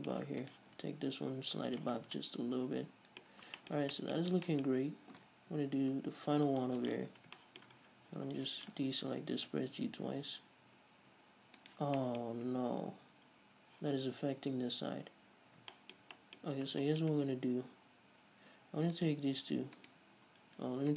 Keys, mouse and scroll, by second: 0.1 shift+middle click, 0.7 right click, 0.9 g, 2.0 click, 2.2 scroll down 1, 2.3 Tab, 2.4-8.6 middle drag, 3.6 scroll up 1, 4.1 Tab, 4.4-4.7 scroll up 1, 5.8 ctrl+r, 7.2 click, 7.3-7.6 scroll up 1, 8.0-8.6 scroll down 1, 8.6 ctrl+click, 8.7-19.2 middle drag, 9.5 g, 12.0 shift+right click, 12.5 scroll up 1, 14.9 scroll down 1, 16.8-17.1 scroll up 1, 19.2-20.2 right drag.